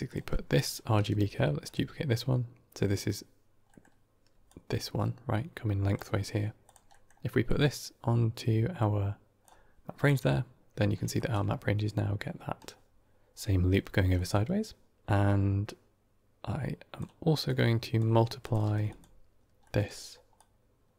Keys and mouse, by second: 0.2 middle click, 1.0 shift+d, 3.6 middle click, 4.2 d, 4.3-5.8 drag, 5.8 d, 5.9 d, 6.5 click, 6.8 middle click, 7.4-9.6 drag, 10.0-10.8 middle drag, 11.0 shift+middle click, 12.3 d, 12.6-14.0 right drag, 13.2 d, 14.0 middle click, 14.9-16.9 drag, 17.3-17.9 drag, 18.3 click, 18.5 shift+d, 19.5 middle click, 20.2 click.